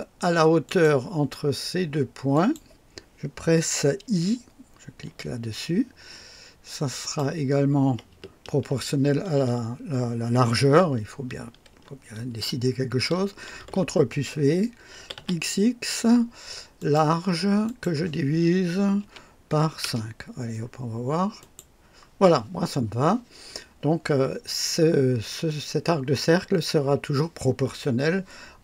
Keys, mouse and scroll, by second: 0.0-0.3 typing, 0.6 click, 2.3 click, 5.0 i, 7.0 click, 13.5 ctrl+v, 14.9 x, 15.0 x, 15.1 x, 16.7 click, 17.6 click, 19.0 KP_Divide, 19.5-20.4 typing, 19.8 KP_Enter, 21.3 click.